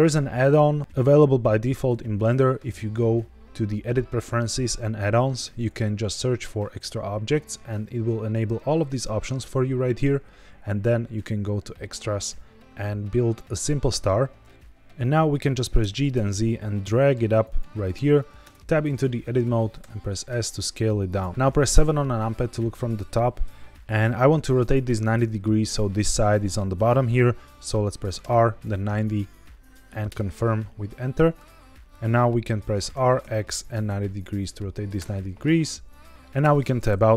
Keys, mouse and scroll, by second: 14.5-14.8 scroll down 1, 15.7 g, 16.0 z, 17.3 click, 18.4 Tab, 19.7 s, 21.0 click, 21.1 right click, 21.3 middle click, 21.3 scroll down 1, 21.6 KP_7, 23.7 KP_1, 28.1 r, 28.5 KP_9, 28.6 KP_0, 30.0 KP_Enter, 32.0 middle click, 32.9 r, 33.1 x, 33.8 KP_9, 34.9 KP_Enter, 34.9 KP_0, 35.6 middle click, 36.1 Tab, 36.3 Tab.